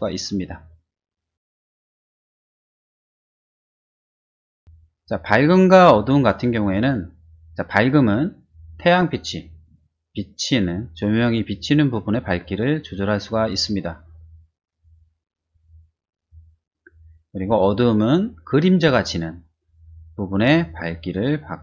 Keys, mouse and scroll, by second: 1.3 click, 2.7 middle click, 12.4-16.2 drag, 20.6-21.6 drag.